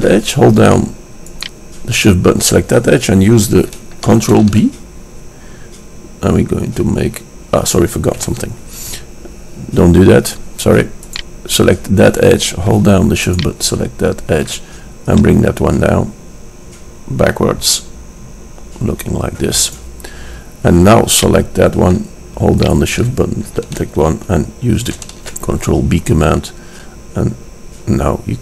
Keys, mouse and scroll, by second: 0.7 middle click, 1.6-3.5 drag, 4.5 ctrl+b, 12.8 click, 13.5-17.1 drag, 21.5-24.5 drag, 24.5 middle click, 25.2 ctrl+b.